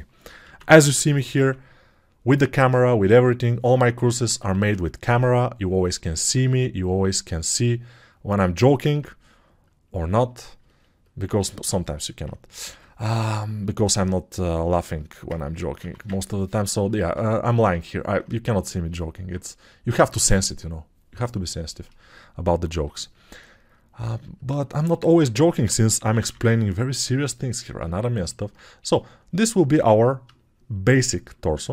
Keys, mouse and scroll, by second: 4.4 i, 16.1 ctrl+1, 26.1 ], 26.2 ].